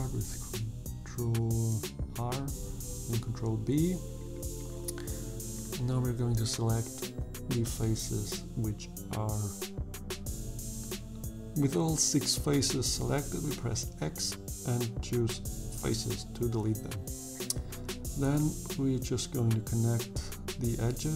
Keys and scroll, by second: 3.4 3, 11.7 x, 17.5 2, 20.1 f.